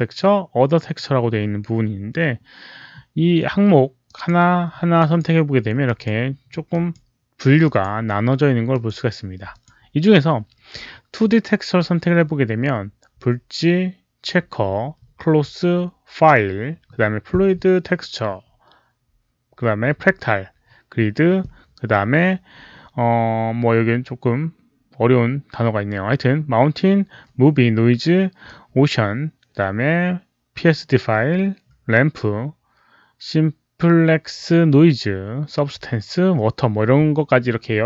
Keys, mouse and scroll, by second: 3.9 click, 4.9 click, 5.7 click, 6.6 click, 7.5 click, 8.6 click, 9.4 click, 14.8 click, 18.3 click.